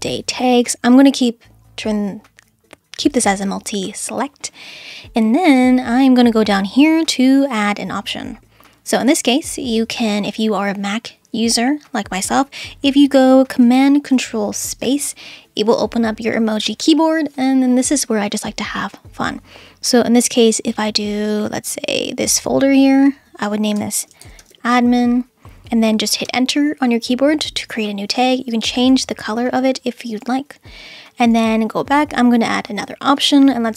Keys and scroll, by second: 14.6 super+space, 23.7-24.9 typing, 26.2 Return.